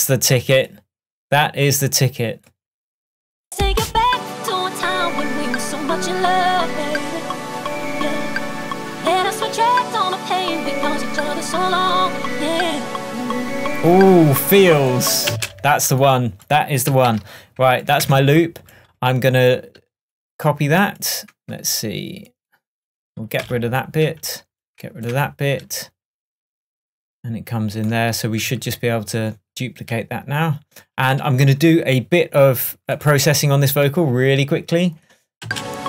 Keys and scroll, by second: 15.3 space, 18.1 super+BackSpace, 23.4 BackSpace, 25.2 BackSpace, 28.5 super+d, 35.5 space.